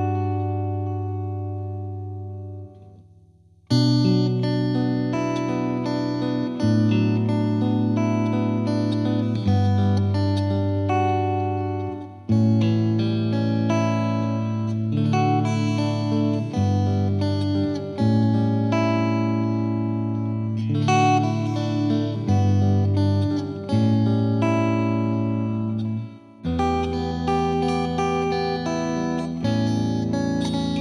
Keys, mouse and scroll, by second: 2.8 KP_0, 3.7-4.1 drag, 4.1 ctrl+s, 4.9-5.5 scroll down 3, 5.5-13.4 drag, 13.9-15.3 drag, 15.3 middle click, 15.5-16.1 scroll up 1, 16.1 space, 16.2 middle drag, 16.5 scroll up 3, 16.7-17.3 shift+middle drag, 17.3-17.8 drag, 17.8 middle click, 18.0 drag, 18.2 scroll down 1, 18.4 middle click, 18.6 scroll up 2, 18.7 shift+middle click, 19.4 x, 19.9 middle click, 20.0-21.7 drag, 21.7 space, 22.3-23.0 middle drag, 23.0 drag, 23.2 scroll down 1, 23.4-23.9 middle drag, 23.9 space, 24.1 middle click, 24.4 scroll up 1, 24.6 scroll down 1, 24.7 middle click, 25.3 drag, 25.4 shift+middle drag, 25.7 scroll down 1, 25.8-26.8 shift+middle drag, 26.9 click, 27.9 x, 28.6-29.3 middle drag, 29.3 click, 29.6-30.8 middle drag.